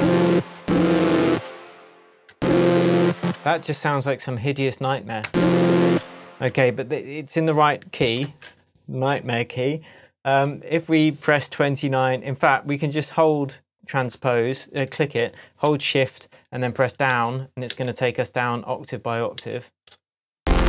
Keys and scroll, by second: 5.2 space, 9.2 alt+space, 10.2 2, 17.1 shift+Down, 19.4 shift+Down, 20.4 shift+space.